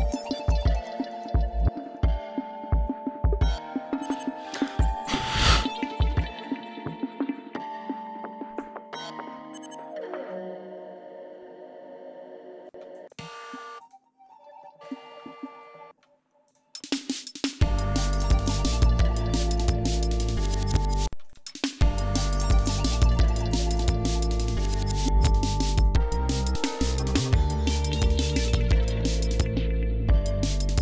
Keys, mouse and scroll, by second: 1.5 scroll up 2, 4.9 ctrl+scroll down 1, 8.5-8.9 ctrl+scroll down 1, 12.5 space, 12.7 click, 13.6 click, 14.6 click, 15.0 ctrl+scroll down 1, 15.7 space, 16.4 space, 16.7 ctrl+scroll down 2, 16.9-17.4 ctrl+scroll up 4, 17.4 ctrl+scroll down 1, 17.7 ctrl+scroll up 1, 18.4 ctrl+click, 18.7 ctrl+click, 19.7 click, 20.8 space, 21.1 click, 21.3 ctrl+scroll up 2, 24.5 scroll down 2, 25.0 ctrl+click, 25.6 click, 26.3 scroll down 2, 26.9 ctrl+click, 27.4-29.4 ctrl+drag, 29.5 scroll down 2, 30.2 ctrl+scroll up 2, 30.7 ctrl+scroll down 2.